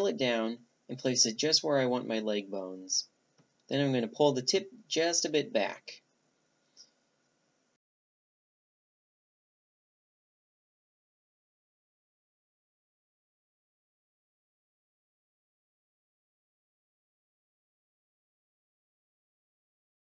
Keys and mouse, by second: 1.8 s, 4.1 g, 7.0 r, 12.4 r, 18.4-20.0 drag.